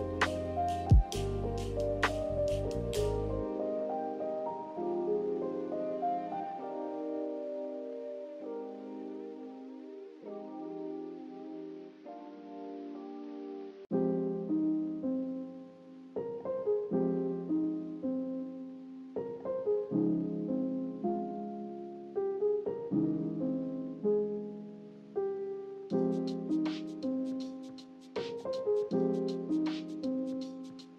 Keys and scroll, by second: 0.0 z, 2.1 b, 3.0 Delete, 5.3 a, 7.7 z, 11.2 n, 13.1 a, 15.4 ctrl+h, 16.1 ctrl+g, 17.7 ctrl+z, 19.4 ctrl+h, 24.4 ctrl+h, 26.2 ctrl+h.